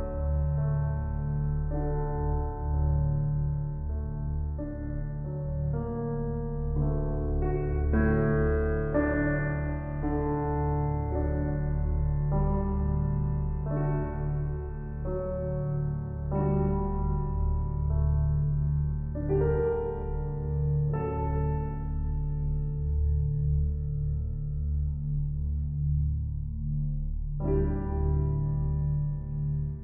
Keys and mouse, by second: 0.6-1.3 typing, 0.8-4.0 drag, 4.1-7.4 ctrl+alt+drag, 6.4-7.2 typing, 7.4 ctrl+l, 8.6 Return, 9.7-11.4 ctrl+alt+drag, 11.1 typing, 11.9 ctrl+alt+drag, 12.9 alt+shift+drag, 14.0 click, 14.8-17.7 typing, 17.2 click, 18.3 click, 18.8 alt+shift+click, 19.3 ctrl+alt+click, 20.2-20.5 typing, 21.8-24.6 ctrl+alt+drag, 24.2-24.6 typing, 26.4-29.0 shift+drag, 29.0-29.3 typing.